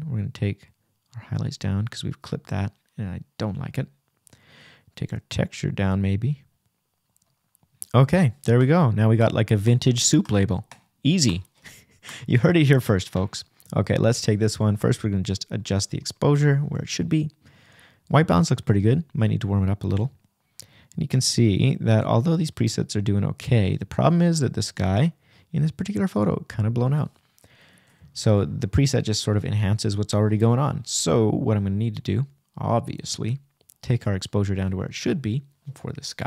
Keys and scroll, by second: 1.1 \, 4.5 Right, 7.3 shift+=, 8.4 shift+-, 21.4 super+z.